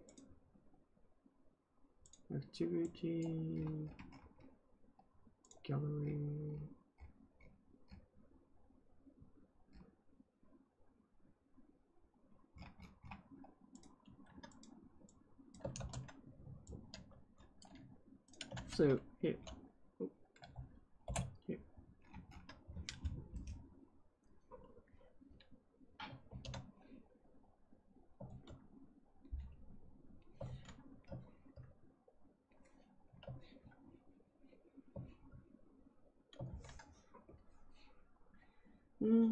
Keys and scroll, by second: 15.7 ctrl+c, 18.5 ctrl+v, 19.2 ], 20.4 BackSpace, 21.0 Return, 26.2 ctrl+d, 28.2 ctrl+z, 30.4 ctrl+z, 36.4 ctrl+z.